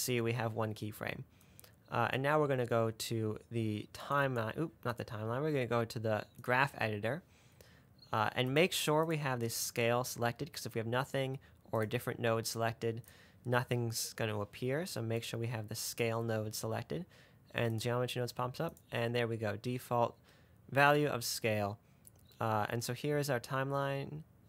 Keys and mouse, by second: 1.8 click, 3.3-4.4 drag, 4.4 middle click, 4.5 click, 5.2-7.1 drag, 9.3 click, 12.8 drag, 13.3 click, 18.0 click, 19.0 click.